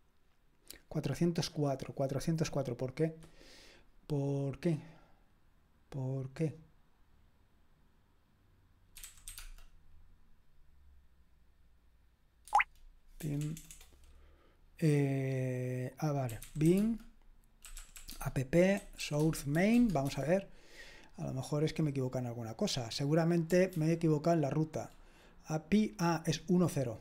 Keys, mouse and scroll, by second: 8.8-9.8 typing, 12.5 Tab, 13.2 BackSpace, 13.4 BackSpace, 13.6 BackSpace, 13.7 BackSpace, 16.2-20.0 typing, 23.8 ctrl+d.